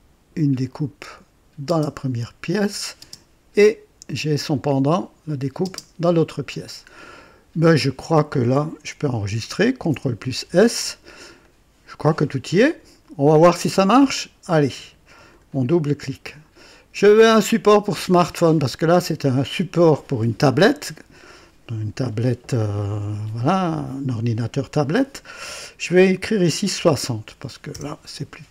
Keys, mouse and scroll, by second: 1.6 space, 1.6 space, 2.5 click, 2.8 typing, 5.6 space, 6.8-7.2 scroll down 1, 7.6-8.5 drag, 9.8 ctrl+s, 11.4-12.9 drag, 13.6-14.3 right drag, 15.2 click, 17.0 click, 26.7 KP_6, 26.8 KP_6, 27.7 KP_0.